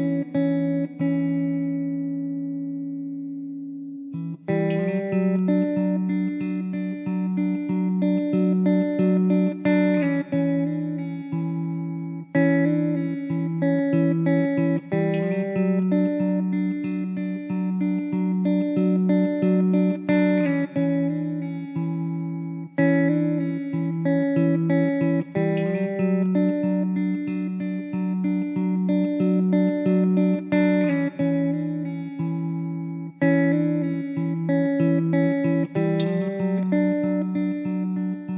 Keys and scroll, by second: 0.0 alt+z, 0.7 3, 1.1 l, 2.0 l, 3.4 x, 4.1 Tab, 4.4 alt+z, 9.0 ctrl+j, 10.1 shift+d, 13.3 r, 21.6 alt+z, 21.9 alt+z, 24.0 alt+z, 26.4 ctrl+z, 26.6 ctrl+z, 27.4 ctrl+s, 34.7-36.0 typing, 37.3 x, 38.1 alt+z.